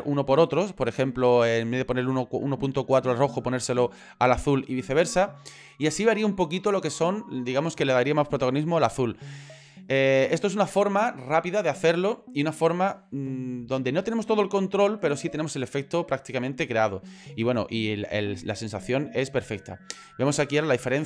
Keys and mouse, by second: 20.3 middle click, 20.8 ctrl+middle click.